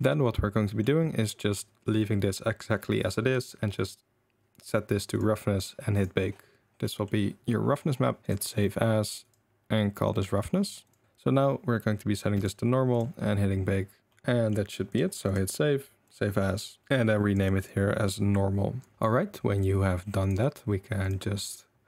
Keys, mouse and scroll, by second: 1.3 click, 3.7-5.2 drag, 6.9 click, 7.8 click, 11.0-12.4 drag, 12.9 click, 14.1 middle click, 15.3-16.1 drag, 19.9 middle click, 20.2 click.